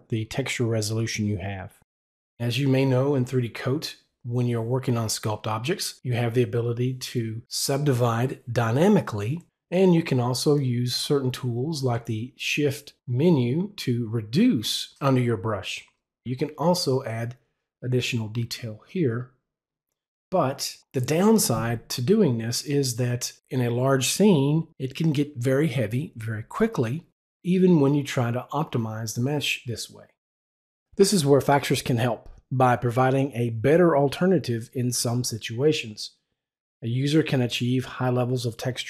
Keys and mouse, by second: 10.5 w, 10.6 click, 16.9 click.